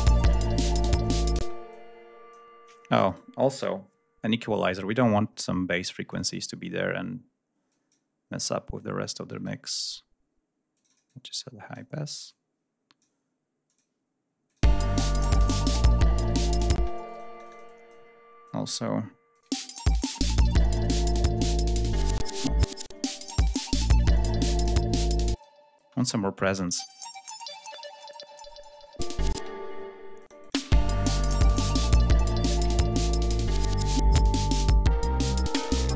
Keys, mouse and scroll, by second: 0.5 click, 1.4 space, 1.7 click, 3.0 right click, 6.0 click, 7.6 click, 8.7 click, 10.7-11.9 drag, 12.2 click, 13.6 click, 14.4 click, 14.6 space, 16.6 space, 17.0 click, 18.0 scroll down 1, 18.4 click, 19.2 click, 19.4 space, 20.5-21.4 drag, 21.4 scroll down 1, 21.7 click, 22.1 space, 22.7 click, 22.9 space, 24.0 click, 25.0 click, 25.7 space, 25.9 click, 26.4 space, 27.0 ctrl+scroll down 2, 27.3 ctrl+scroll up 2, 28.9 click, 29.3 space, 30.1-30.6 drag, 30.5 space, 30.7 ctrl+scroll down 2, 32.0 click, 32.7 ctrl+scroll down 2, 33.4 ctrl+g, 33.8 ctrl+scroll up 2.